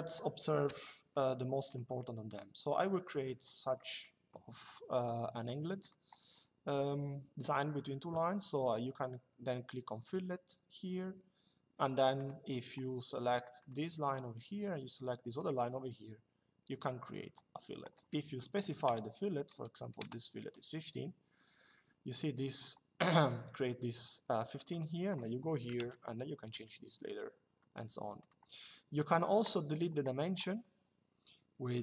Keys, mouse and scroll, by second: 0.8 click, 2.8 Escape, 3.5 middle click, 5.5 click, 11.9 click, 13.3 click, 15.1 click, 18.4 KP_1, 19.7 Return, 24.3 click, 25.3 KP_1, 26.2 Return, 27.9 click.